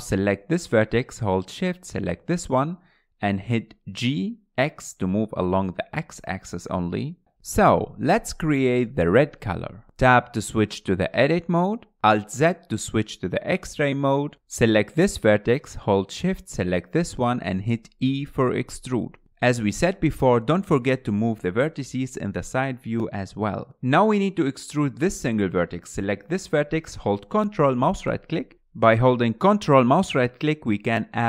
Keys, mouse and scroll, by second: 0.1 Tab, 2.1 click, 2.9 shift+click, 4.7 g, 6.5 g, 7.2 shift+middle click, 7.2 scroll up 4, 8.0-8.6 scroll up 1, 8.6-9.7 scroll up 5, 9.7 shift+middle click, 10.3 click, 10.7 Tab, 11.1 scroll up 4, 11.6-13.3 shift+middle drag, 13.3-14.9 scroll down 5, 13.9-14.9 shift+middle drag, 14.9 click, 15.4 alt+z, 15.9 alt+z, 16.4 scroll up 2, 16.6 shift+middle click, 17.1 click, 17.4 scroll down 2, 17.5 shift+middle click, 17.8 shift+click, 19.8 e, 21.1 click, 21.4 g, 22.0 g, 22.1 click, 22.8 scroll up 3, 23.0 shift+middle click, 23.2 g, 23.9 click, 24.1 g, 25.3 alt+z, 26.7 click, 29.4 ctrl+right click, 30.0-30.6 shift+scroll down 2, 30.6-31.2 shift+middle drag.